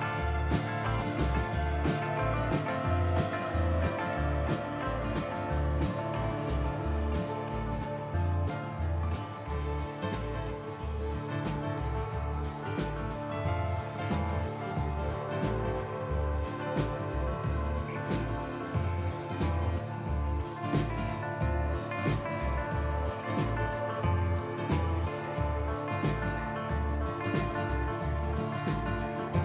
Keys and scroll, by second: 0.8 f, 1.0 ctrl+z, 3.0 F4, 4.5 4, 5.5 Delete, 6.4 s, 7.5 ctrl+z, 9.3 F4, 10.7 F4, 11.3 Delete, 11.6 Delete, 11.8 Delete, 12.5 F4, 12.6 F4, 13.2 i, 14.8 4, 15.2 Delete, 15.2 Delete, 15.5 s, 24.9 b, 26.8 b, 27.9 s.